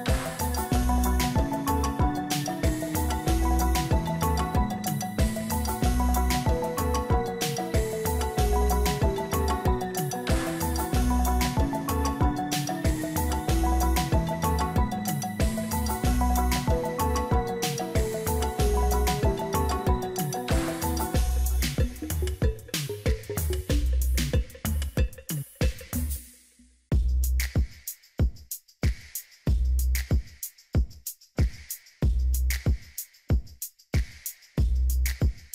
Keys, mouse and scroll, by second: 3.2 ctrl+t, 4.3 shift+click, 10.0 alt+click, 33.2 ctrl+j, 34.2 ctrl+click.